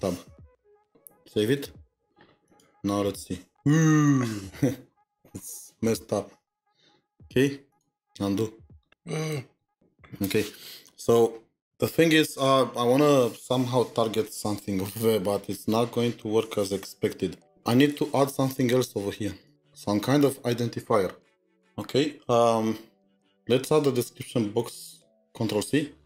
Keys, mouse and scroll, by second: 0.6 shift+Tab, 1.4 ctrl+s, 4.9-6.0 scroll down 17, 9.3 scroll, 9.6 ctrl+z, 9.8 ctrl+z, 10.1-11.0 scroll up 3, 10.1 ctrl+z, 11.7 ctrl+s.